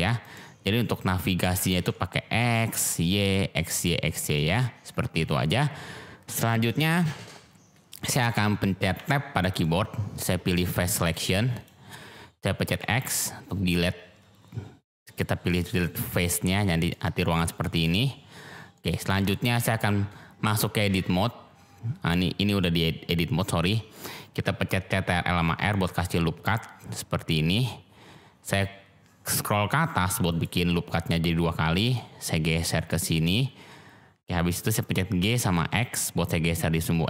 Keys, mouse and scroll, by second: 0.2 click, 1.7 ctrl+z, 2.4 s, 2.7 x, 3.7 click, 4.3-4.8 drag, 7.9 click, 9.0 Tab, 11.0 click, 12.8 x, 16.5-16.9 middle drag, 17.4 middle click, 18.7-19.1 middle drag, 19.5-20.0 middle drag, 25.3 ctrl+r, 31.8 click, 35.1 g, 35.5 x.